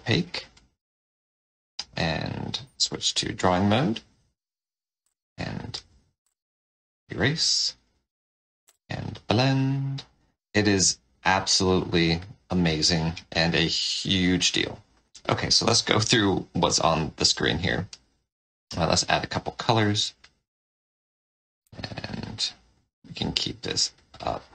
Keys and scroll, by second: 2.6 1, 8.6 4, 12.9 4, 13.3 5, 18.6 F6.